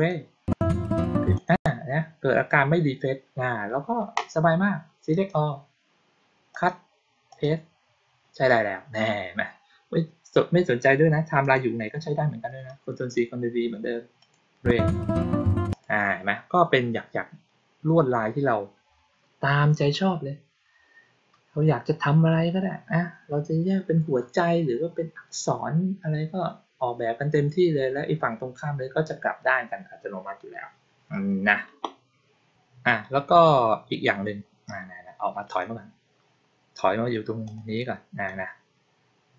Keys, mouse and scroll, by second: 1.2 click, 5.0 click, 6.4 click, 7.2 click, 11.3 click, 12.5-13.0 drag, 14.0 click, 15.6 click, 35.3 click, 37.3 click, 38.1 click.